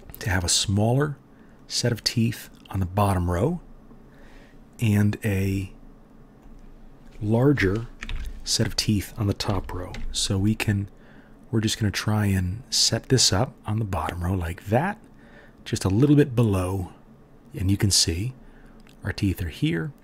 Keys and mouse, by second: 0.7-8.2 drag, 5.3 r, 8.0 ctrl+KP_3, 9.4 g, 9.9-12.5 drag, 16.9-20.0 drag.